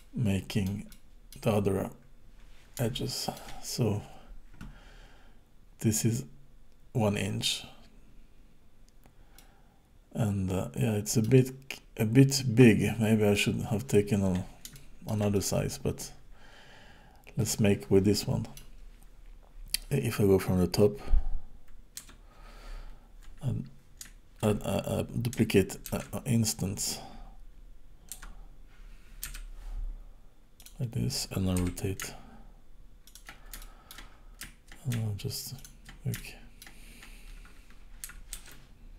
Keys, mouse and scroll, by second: 0.9 middle click, 2.1-2.4 scroll down 1, 2.9 shift+middle click, 3.7 scroll up 2, 8.5-9.4 scroll down 2, 9.4 middle click, 13.3 middle click, 14.7 shift+middle click, 15.3 middle click, 22.0 KP_7, 25.9 alt+d, 31.6 r, 33.6 shift+middle click, 34.1-34.4 scroll down 2, 35.5 shift+click, 36.1 shift+middle click, 38.4 alt+d.